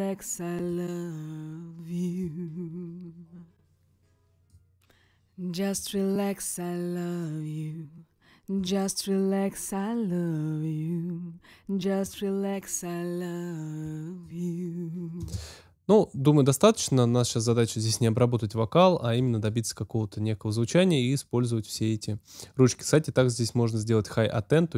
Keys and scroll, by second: 15.2 space.